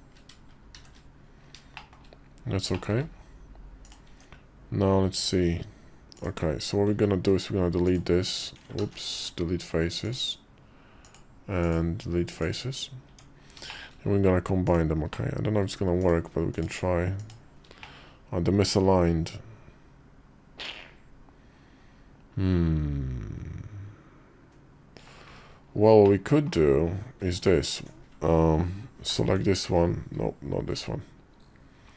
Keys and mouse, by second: 0.5 shift+2, 1.5 shift+click, 2.5 shift+middle click, 3.8 Tab, 6.9 x, 8.6 ctrl+z, 8.9 x, 10.8 click, 11.5 click, 11.7 x, 12.8 Tab, 13.4 shift+middle click, 14.4 click, 14.9 middle click, 15.8 shift+click, 17.0 shift+click, 17.6-24.8 middle drag, 25.8 middle click, 27.1 alt+click, 28.9 ctrl+l.